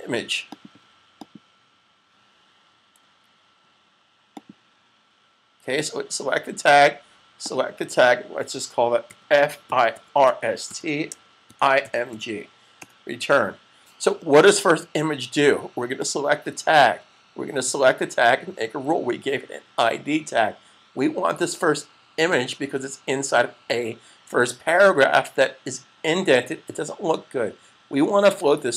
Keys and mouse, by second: 4.3 click, 7.4 click, 9.0-12.1 typing, 14.8 typing, 15.8 click, 22.0 click.